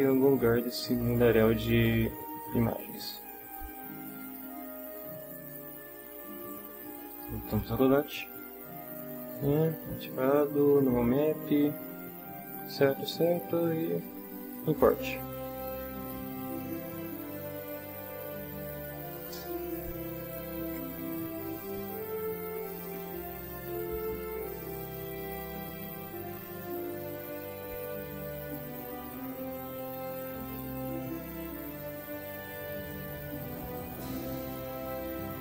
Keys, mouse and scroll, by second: 7.1 click, 11.2-12.2 drag, 14.8 click.